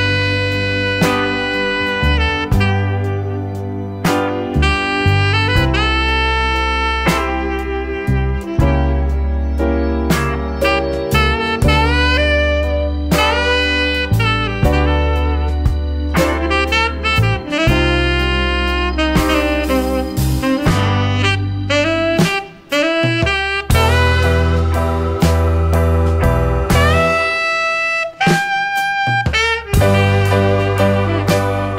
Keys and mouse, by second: 2.8-4.2 drag, 4.9-7.7 drag, 8.0-11.6 drag, 12.3 shift+click, 13.3-14.1 drag, 14.7-15.6 drag, 16.7-18.8 drag, 19.4-19.8 shift+drag, 20.6-21.5 drag, 23.0-25.5 drag, 26.4 shift+click, 26.5 shift+middle click, 27.7 shift+a.